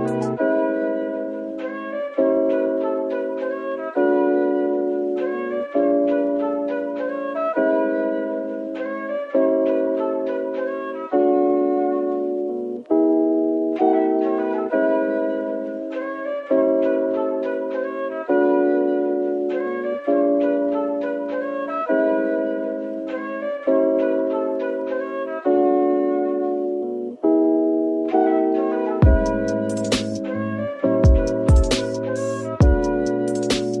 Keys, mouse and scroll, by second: 1.1 middle click, 1.9 Tab, 2.4 Tab, 3.3-4.1 typing, 5.2 middle click, 10.2 ctrl+z, 10.9 typing, 12.2 Tab, 12.9 typing, 21.7 double click, 22.1 right click, 22.8 middle click, 25.9 right click, 27.8 Tab, 28.2 middle click, 30.9 shift+click, 31.3 middle click, 33.6 middle click.